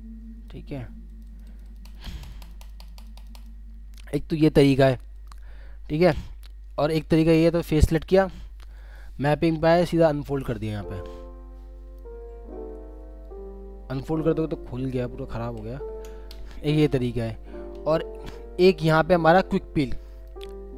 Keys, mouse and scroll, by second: 1.2 double click, 4.5 middle click, 13.8-14.8 scroll up 1, 16.0 ctrl+z.